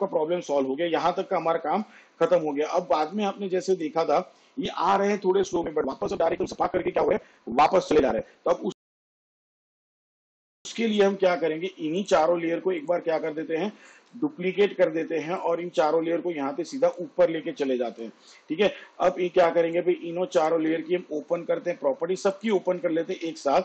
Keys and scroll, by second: 13.9 ctrl+d, 23.1 u.